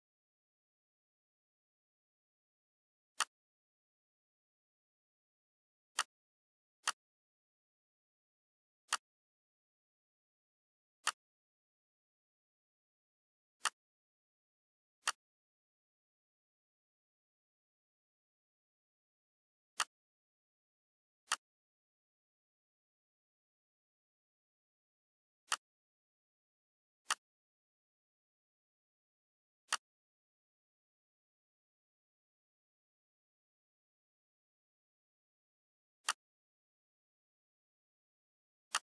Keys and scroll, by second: 1.0 shift+F4, 4.1 shift+F5, 4.6 shift+F4, 23.4 ctrl+c, 23.9 ctrl+v, 31.8 ctrl+a, 33.1 ctrl+g, 34.3 shift+F4, 37.0 2, 37.5 0, 37.8 Return.